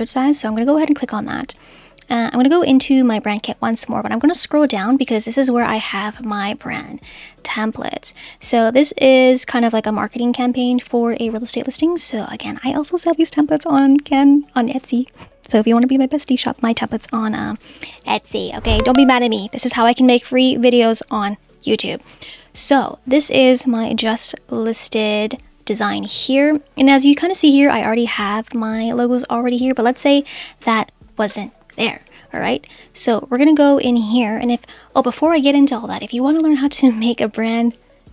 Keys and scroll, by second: 30.6 BackSpace.